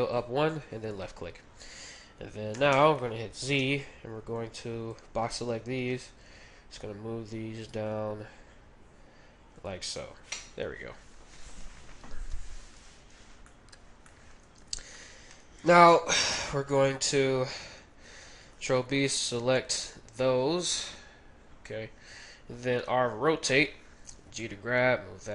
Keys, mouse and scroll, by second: 2.6 z, 2.7 a, 3.6 a, 3.6 b, 5.9 g, 8.7 g, 10.0-12.5 middle drag, 12.3 a, 12.9-16.9 middle drag, 17.6 b, 18.5 b, 20.3-21.5 middle drag, 21.6-23.9 middle drag, 22.6 r, 23.9 g.